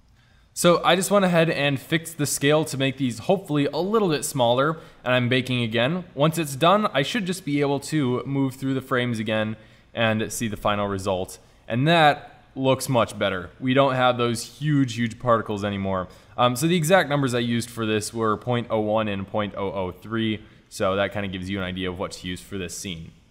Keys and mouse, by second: 10.6 Right, 11.7 Right, 20.4-21.7 middle drag, 22.0 drag.